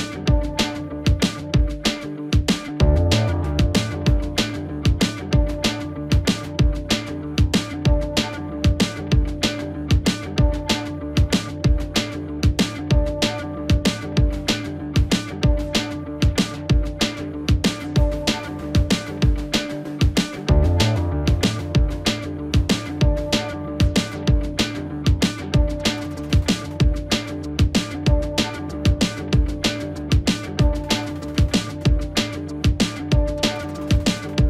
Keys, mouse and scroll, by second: 0.8 space, 4.4 space, 4.4-8.5 drag, 9.0 right click, 19.9 click, 20.0 click, 20.3 right click, 27.1 click, 30.4-32.1 scroll down 1.